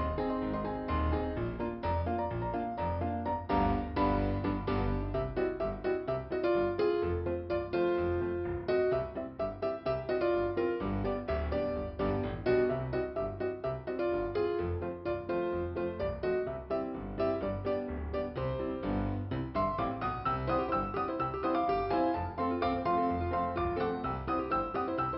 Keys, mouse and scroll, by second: 0.6 click, 0.9 click, 1.2 click, 3.9 scroll down 2, 4.6 scroll up 1, 4.7 scroll down 1, 4.8-6.1 scroll up 2, 6.1 right click, 7.0 click, 8.3 click, 11.0 click, 13.2 click, 13.5 click, 14.1-14.6 scroll down 2, 15.8 middle click, 16.8 right click, 17.0 right click, 18.4 middle click, 19.2-20.3 scroll up 2, 21.7 click, 23.3 click, 23.4 click, 24.2 right click, 24.5 right click, 25.0 right click.